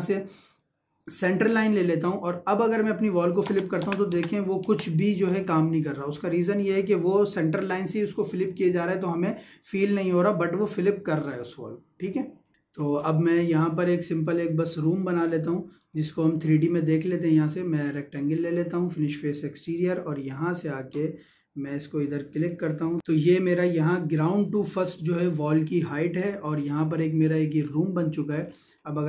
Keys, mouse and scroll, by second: 0.4 click, 3.5 space, 12.6 Escape, 14.6 click, 18.3 click, 22.4 click, 22.8 Escape, 23.0 click, 26.3 middle click, 27.6 click, 28.5 scroll down 1, 28.9 shift+middle click.